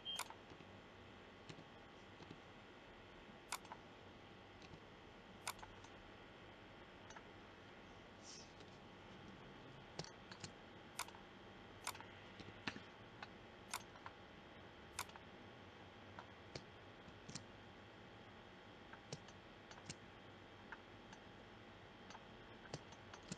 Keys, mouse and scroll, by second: 0.5 t, 1.4 t, 2.1 r, 4.5 g, 8.5 KP_0, 17.0 shift+z, 18.6-20.3 middle drag.